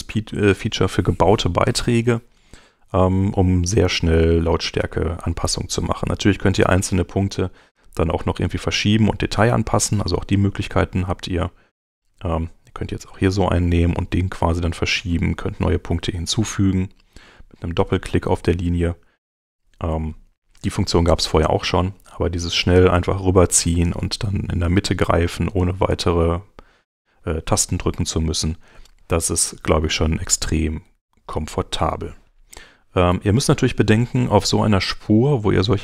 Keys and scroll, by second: 30.8 super+Tab, 33.1 super+Tab.